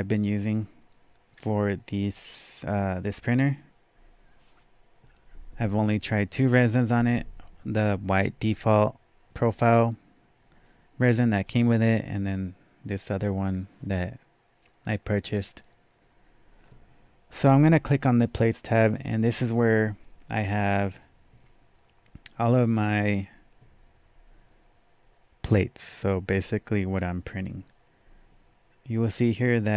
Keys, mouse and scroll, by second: 17.4 click.